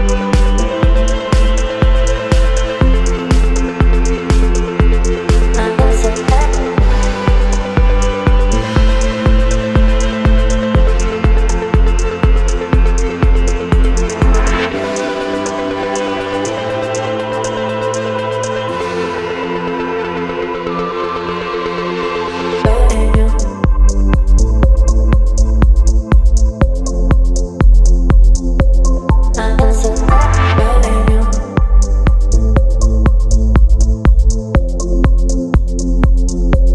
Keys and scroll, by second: 0.1 ctrl+j, 11.2 KP_9, 30.7 space.